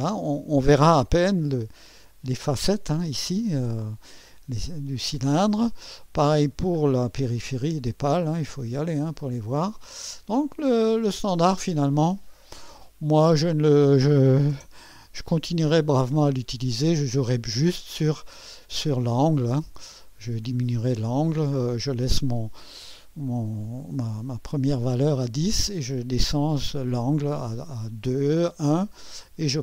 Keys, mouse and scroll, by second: 2.0-3.1 drag, 4.1 scroll down 1, 6.5 middle click, 7.3-8.0 scroll up 2, 8.5-9.1 scroll down 2, 9.7-10.6 drag, 10.7-11.3 right drag, 11.5 scroll down 2, 12.4-13.6 right drag, 14.5 0, 16.0-16.9 right drag, 29.3 scroll up 2.